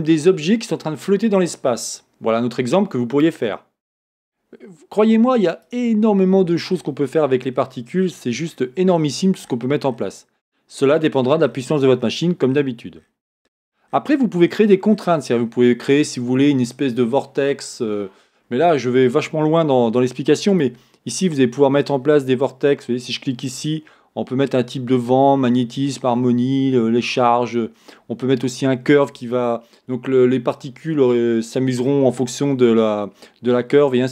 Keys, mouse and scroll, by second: 5.9 click, 6.8-7.5 scroll down 1, 20.7-34.1 drag, 21.4-21.9 scroll down 1.